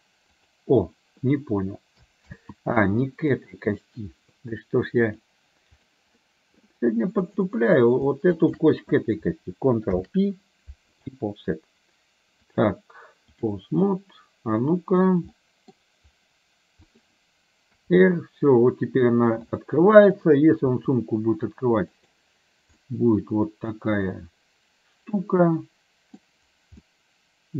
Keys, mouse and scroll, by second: 2.3 ctrl+z, 3.4 middle click, 5.1 click, 6.2 middle click, 7.3 click, 8.4 shift+click, 10.1 ctrl+p, 12.6-13.7 drag, 14.0-15.1 middle drag, 15.5 middle click, 17.0 click, 17.8 r, 20.8 r, 22.8-26.2 middle drag, 26.9-27.5 middle drag.